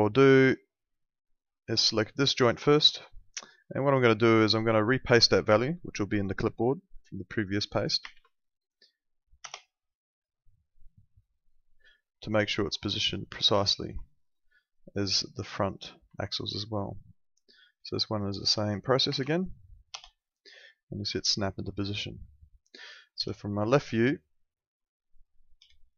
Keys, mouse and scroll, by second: 1.2 click, 1.8 alt+middle click, 4.8 ctrl+4, 11.7 ctrl+4, 12.2 middle click, 13.6 alt+middle click, 15.5 click, 16.1 alt+middle click, 17.7 click, 19.0 ctrl+v, 19.9 Return, 19.9 KP_Enter, 21.1 alt+middle click.